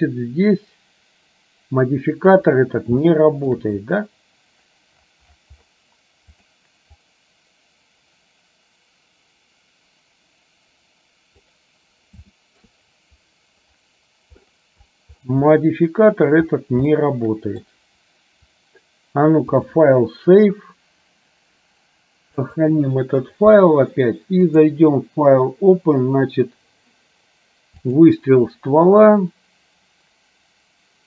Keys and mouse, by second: 3.3 shift+middle click, 6.5 click, 7.0-11.5 drag, 12.4 shift+middle click, 15.8 middle click, 17.0 shift+middle click, 19.7-22.8 drag, 24.7-28.3 drag.